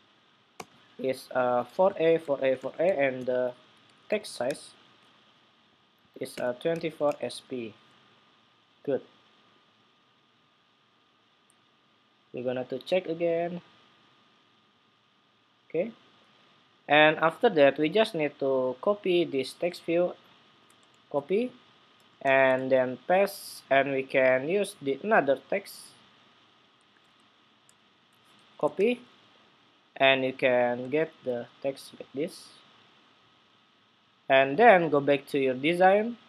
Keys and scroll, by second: 20.7 super+c, 22.4 super+v, 26.6 super+a, 27.4 super+c, 27.6 super+c, 28.5 ⟲, 30.7 super+v.